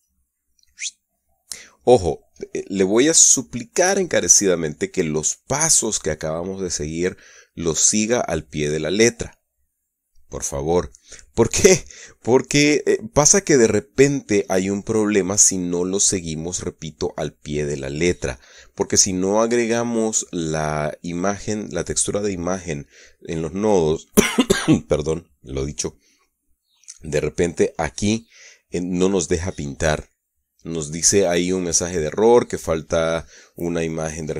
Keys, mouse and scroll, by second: 1.1 click.